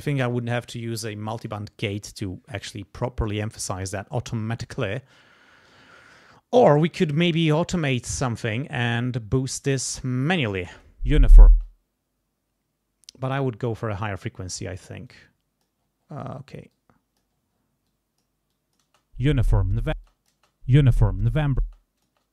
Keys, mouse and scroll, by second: 10.0 click, 10.7 space, 11.5 space, 11.6-14.0 drag, 14.0-15.1 scroll up 1, 15.1 click, 15.8-16.6 scroll down 1, 16.7 click, 17.3-17.8 scroll up 1, 17.9 click, 18.5 click, 18.8 space, 20.0 space, 20.1 click, 21.6 click, 21.6 space.